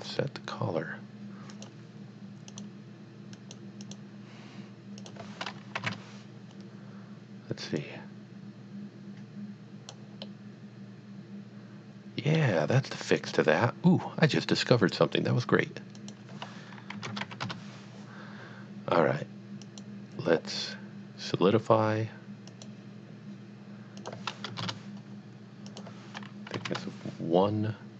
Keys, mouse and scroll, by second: 0.0 middle click, 1.5 click, 2.5 click, 3.3 click, 3.7 click, 3.9 click, 5.0 click, 5.8 KP_2, 5.8 KP_Enter, 7.8 click, 10.2 middle click, 13.2 click, 15.9 click, 16.3 click, 16.9 KP_Decimal, 17.1 KP_0, 17.2 KP_5, 17.4 KP_Enter, 19.7 click, 22.5 click, 24.0 click, 24.5 KP_0, 24.6 KP_Enter, 25.8 click, 26.5 KP_1, 26.7 KP_Enter.